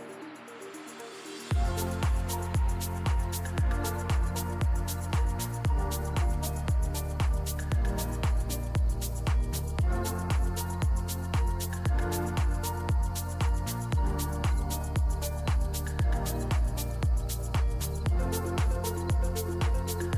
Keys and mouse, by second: 3.0 middle click, 3.3 middle drag, 3.9 middle drag, 4.7 KP_1, 5.3 shift+middle drag, 5.6 middle drag, 6.1 middle click, 7.5-9.4 shift+drag, 10.0 KP_1, 11.4-11.8 shift+drag, 12.2 shift+middle click, 12.2 shift+drag, 14.9 shift+a, 16.4 middle click, 16.5 drag, 17.4-19.3 drag, 19.3 r.